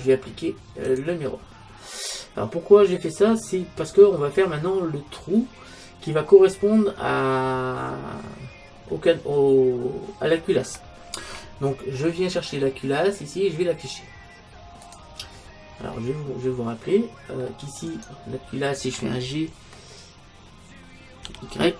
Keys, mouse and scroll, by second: 0.9-2.7 drag, 2.1-3.9 middle drag, 14.9-16.8 drag, 16.0 middle click, 16.8 middle click, 18.0-19.8 right drag, 21.3 g.